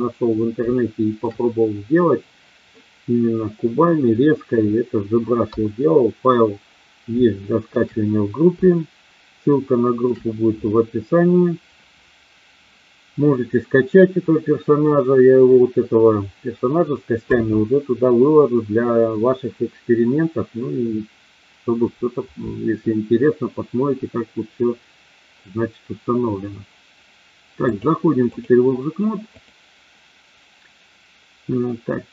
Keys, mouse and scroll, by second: 0.7 shift+middle click, 2.7-3.9 middle drag, 5.4 KP_1, 7.4 shift+middle click, 8.6-10.0 shift+middle drag, 27.6 click, 29.2 click.